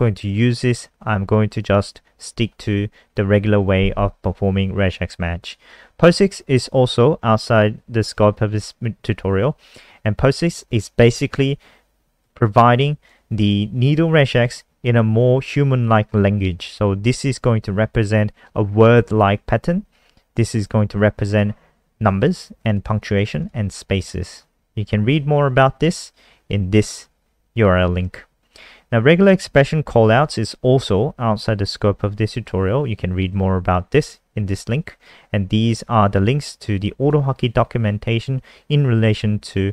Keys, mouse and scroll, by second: 6.3 click, 20.5 click, 21.7-22.0 scroll down 1, 22.5 click, 22.7 click, 23.2 click, 23.4 click, 24.7 scroll down 1, 25.5 click, 32.0 scroll down 1, 33.2 click.